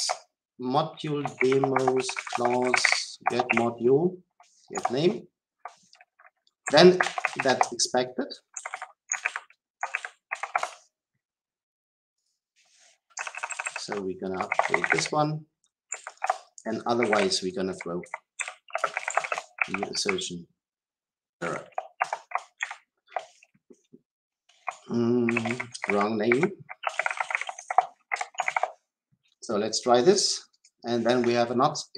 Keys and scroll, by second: 1.2 Return, 9.1 ctrl+x, 9.2 ctrl+shift+Up, 21.9 Return.